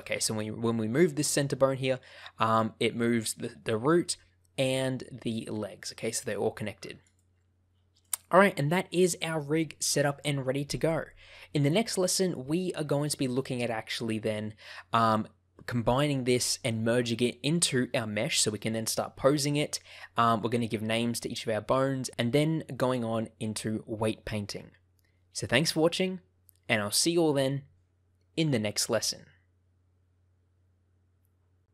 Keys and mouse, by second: 7.0 right click, 11.8 shift+middle click.